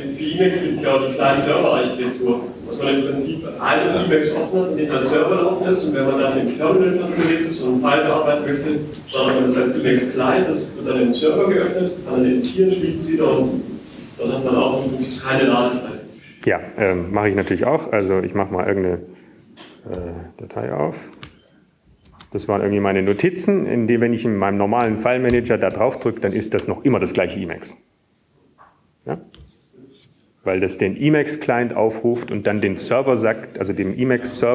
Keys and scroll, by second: 21.5 super+f, 23.8 Return, 23.8 6, 25.4 Down, 26.0 Down, 29.8 Return.